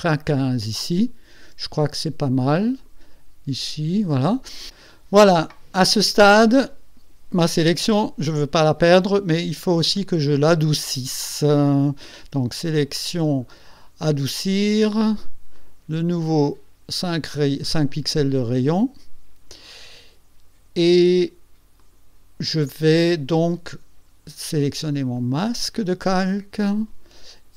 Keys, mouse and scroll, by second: 1.9-3.0 shift+middle drag, 4.7 click, 11.2 click, 15.6 click, 18.5 click, 21.8 click, 25.2 click.